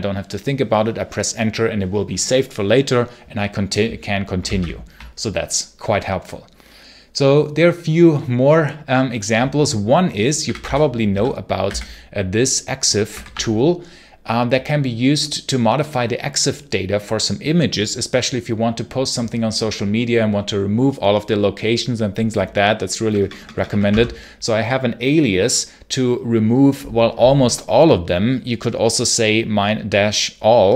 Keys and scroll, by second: 4.3 ctrl+c, 4.4 ctrl+l, 10.1-11.5 typing, 13.0 t, 22.9-23.8 typing.